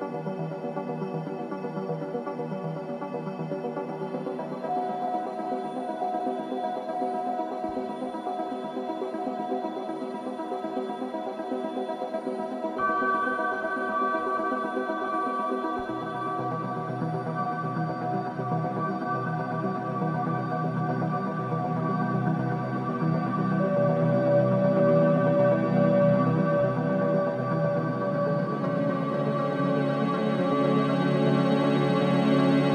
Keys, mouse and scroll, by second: 0.0 Return, 1.1 click, 3.2 scroll down 1, 4.4-4.7 scroll up 1, 6.9 typing, 14.2 scroll down 1, 14.2 typing, 15.0 scroll up 1, 17.3-23.1 drag, 23.1 scroll down 1, 23.8 scroll up 1, 26.2 scroll down 1, 26.9 click, 28.7 scroll up 1, 29.0 scroll down 1, 30.7 click, 30.7 typing.